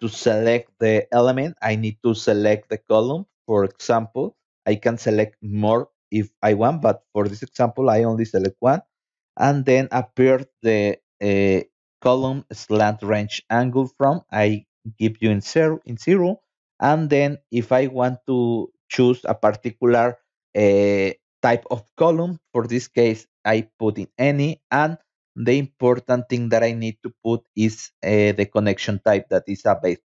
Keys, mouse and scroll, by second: 0.1 click, 1.5 scroll down 1, 2.5 middle click, 3.3 shift+middle click, 3.5 shift+middle click, 4.3 middle click, 4.9 scroll up 2, 5.7 click, 15.9 click, 20.4 click, 21.1 click, 24.1 click, 26.1 click, 29.8 scroll up 2.